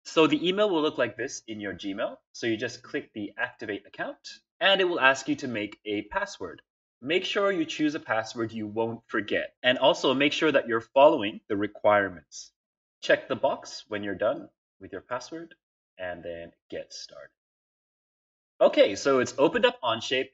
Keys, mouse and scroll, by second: 14.2 click, 16.5 click.